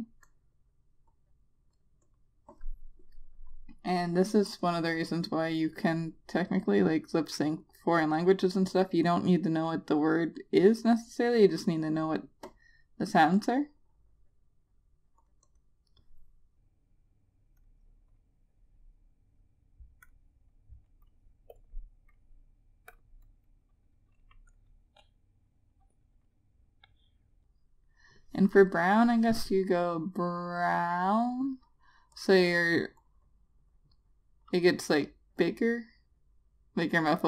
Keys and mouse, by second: 13.9 click, 18.1 click, 20.6 click, 32.7 click.